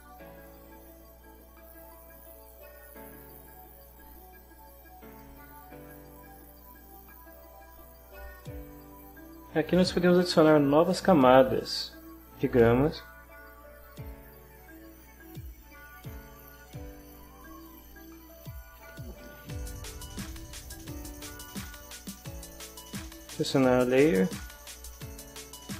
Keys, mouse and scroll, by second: 4.1 scroll up 1, 4.9-6.1 right drag, 11.3 click, 12.6 click, 13.8 click, 16.5 click, 17.6 click, 18.9-20.1 drag, 20.3 click, 23.2 click, 24.6-25.7 right drag.